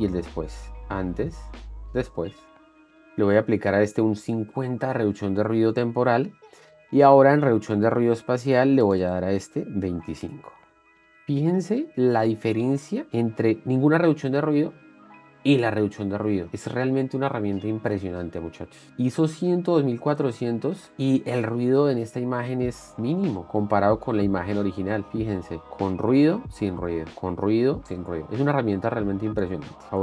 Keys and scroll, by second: 10.8 Return, 13.9 ctrl+d, 16.1 ctrl+d, 23.0 ctrl+d, 26.6 ctrl+d, 28.1 ctrl+d.